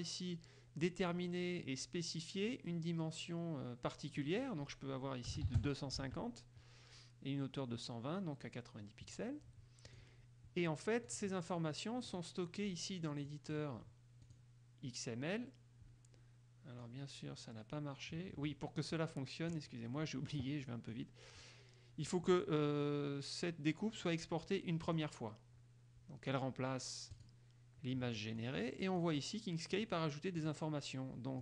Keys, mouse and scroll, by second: 4.4 click, 5.5 KP_2, 5.6 KP_5, 5.7 KP_0, 6.1 Tab, 10.1 click, 11.3 click, 12.3 click, 13.4 click, 14.4 click, 17.0-19.9 drag, 21.1 click, 25.0 click, 27.3 click, 28.5 click, 29.9 click, 30.5 click.